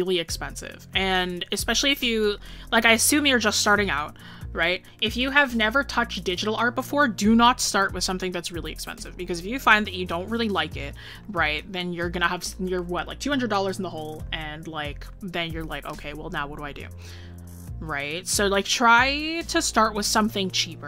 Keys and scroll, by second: 6.6 scroll up 1.